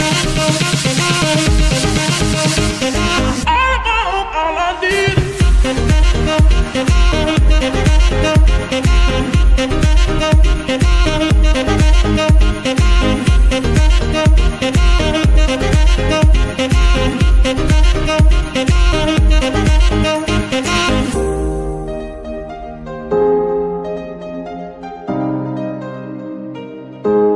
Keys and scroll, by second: 7.1 shift+g, 10.8 z, 12.5 g, 12.5 z, 14.6 z, 17.0 s, 17.1 x, 19.7 r, 20.1 Escape, 23.5 g, 23.6 y.